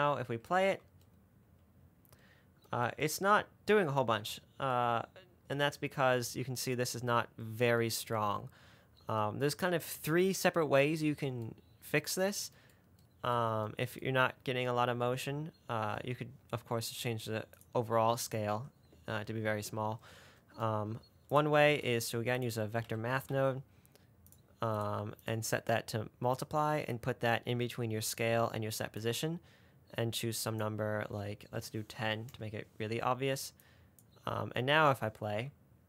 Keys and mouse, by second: 1.0 space, 6.4 space, 17.9 click, 21.9 shift+a, 25.6-26.7 drag, 27.3-29.3 drag, 30.5-32.8 drag, 34.1 click, 35.6 space.